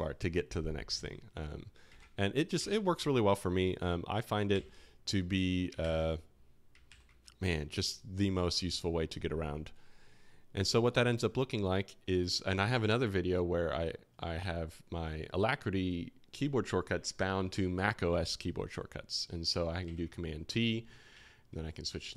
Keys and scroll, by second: 2.5 super+Tab, 3.9-4.5 typing, 5.8 super+w, 6.8 super+w, 19.8 super+t, 21.5 alt+2.